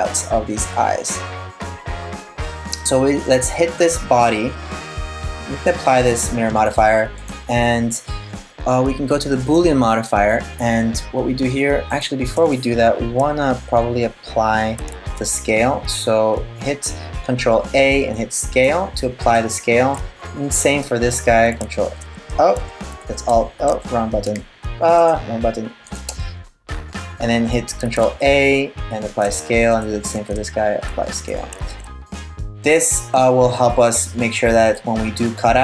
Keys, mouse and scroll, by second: 0.2 middle click, 2.4 right click, 5.6 click, 6.8 click, 11.5 right click, 14.5 ctrl+a, 18.8 right click, 21.2 alt+a, 23.9 space, 25.5 click, 27.6 ctrl+a, 29.4 right click, 29.7 ctrl+a, 31.8 middle click, 34.3 right click.